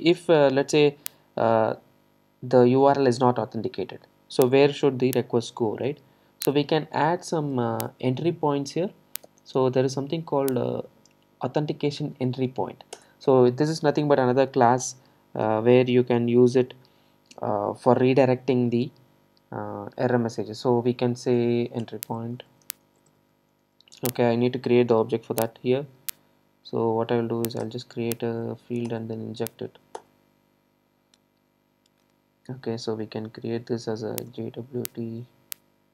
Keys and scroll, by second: 13.0 Return, 27.6 alt+Return.